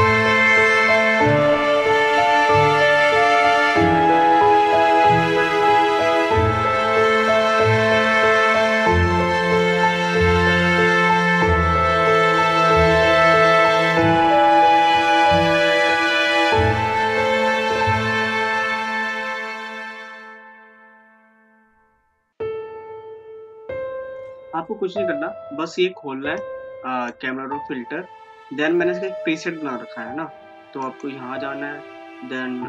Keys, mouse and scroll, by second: 1.1 Right, 3.3 click, 5.5 click, 6.7 click, 7.8 click, 9.9 ctrl+shift+e, 11.1 ctrl+z, 12.1 ctrl+alt+shift+e, 13.3 click, 14.3 click, 26.5-29.7 drag, 31.0 click.